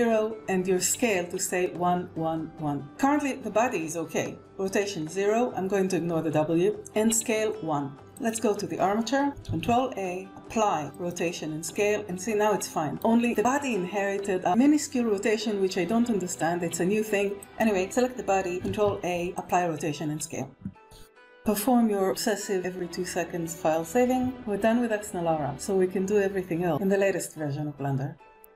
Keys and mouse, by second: 8.0 click, 9.3 ctrl+a, 17.2 click, 18.5 ctrl+a, 23.8 ctrl+s.